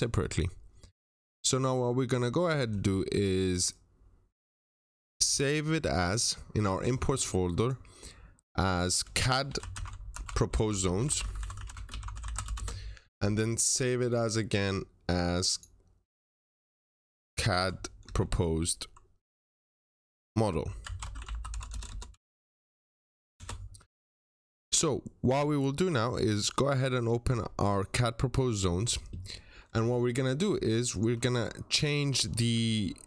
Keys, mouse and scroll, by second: 9.4-12.4 typing, 12.4 Return, 14.0 click, 17.2-17.9 typing, 20.7-23.2 typing, 26.2 click, 32.4 click.